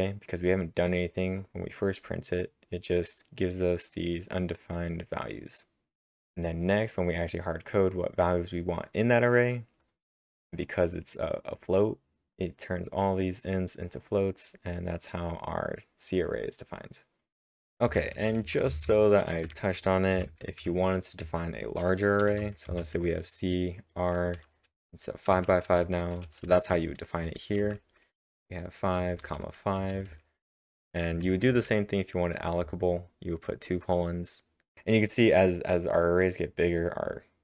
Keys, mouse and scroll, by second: 6.1-7.1 drag, 7.1-12.7 drag, 13.4-17.4 drag, 17.7-18.7 typing, 20.1-21.1 typing, 22.2 shift+0, 24.1-28.1 typing, 33.0-34.3 typing.